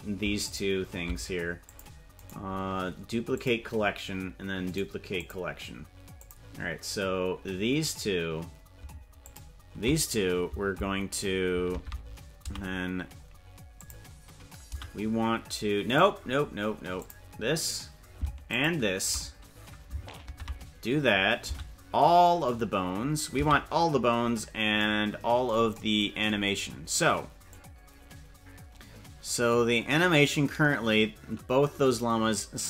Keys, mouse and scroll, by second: 0.4 ctrl+click, 1.6 click, 2.2-3.6 right drag, 4.8 right click, 6.1 click, 9.2 ctrl+click, 11.7 ctrl+Tab, 12.5 a, 13.7 click, 14.7 a, 15.9 right click, 16.9 click, 18.4 ctrl+click, 20.3 ctrl+Tab, 21.5 a, 23.3 a, 23.9-24.7 scroll down 6, 27.5-32.6 drag.